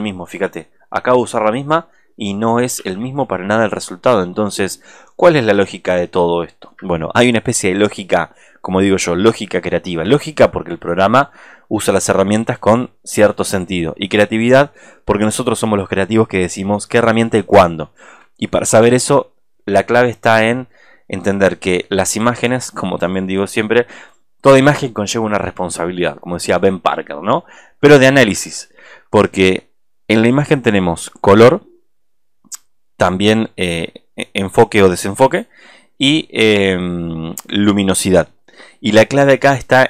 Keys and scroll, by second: 0.6 alt+space, 2.8 ctrl+z, 6.2 alt+space.